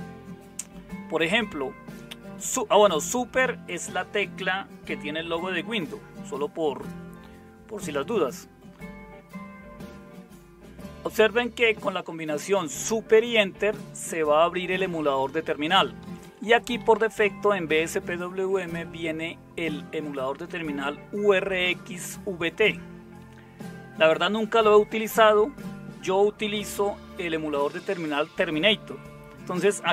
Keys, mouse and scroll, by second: 16.0 Right, 16.2 Right, 16.5 Right, 16.8 Left, 17.2 Left.